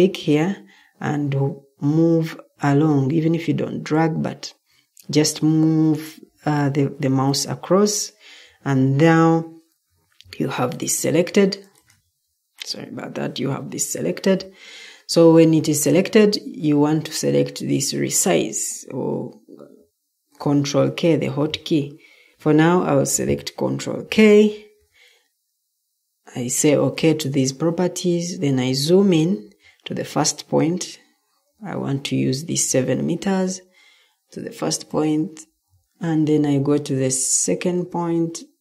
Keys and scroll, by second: 22.3 Escape, 23.9 ctrl+k.